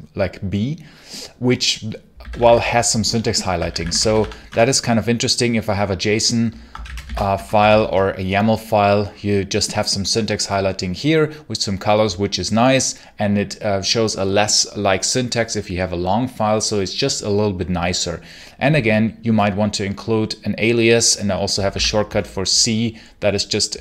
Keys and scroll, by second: 1.8-4.5 typing, 6.3-8.0 typing, 21.6 c, 21.9 space.